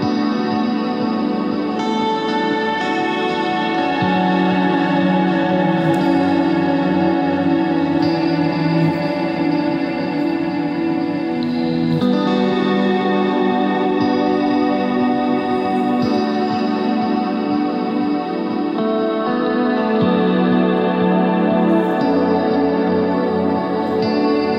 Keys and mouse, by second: 3.5 ctrl+Tab, 4.1-6.0 drag, 7.3 click, 8.8 e, 9.6 ctrl+z, 10.1 e, 13.3 ctrl+Tab, 14.6 z, 14.6 c, 15.7 z, 16.1 middle click, 17.6 Tab, 19.4 Tab, 20.0 ctrl+r.